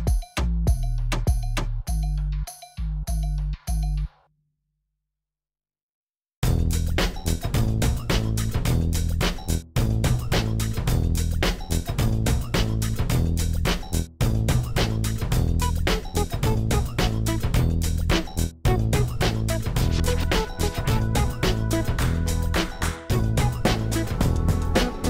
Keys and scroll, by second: 7.9 7, 9.8 shift+d, 13.6 shift+d, 15.4 shift+d.